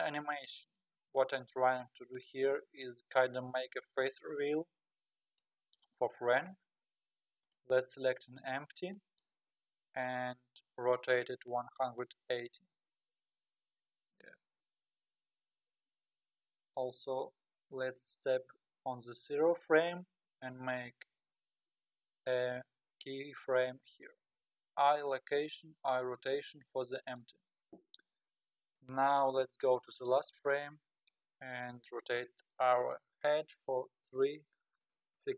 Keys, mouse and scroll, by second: 1.9-2.5 scroll down 3, 4.9-6.0 middle drag, 6.0-6.4 scroll up 1, 6.4-7.4 scroll down 3, 7.4 click, 7.8 click, 11.0 r, 16.7-25.2 drag, 24.3 i, 27.2 i, 28.7-31.9 drag, 32.0 r.